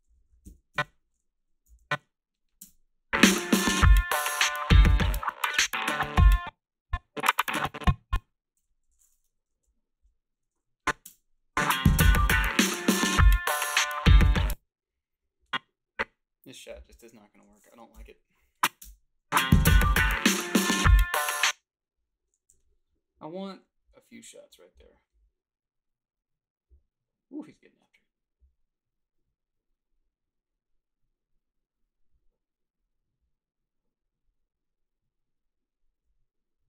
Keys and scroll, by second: 0.2 Up, 0.3-2.6 typing, 0.7 Left, 0.7 Down, 6.2 space, 8.6 g, 9.5 \, 10.0 Delete, 14.3 space, 17.9 Delete, 18.8 space, 21.2 space, 22.5 h, 23.5 a.